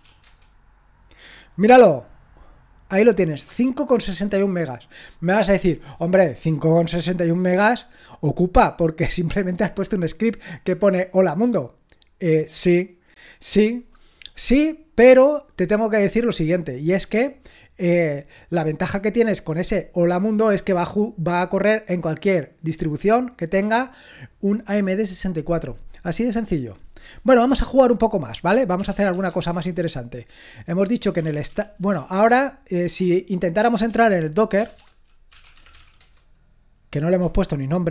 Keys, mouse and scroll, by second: 0.0-0.5 typing, 3.3-6.2 drag, 28.5-29.6 typing, 30.8-36.2 typing.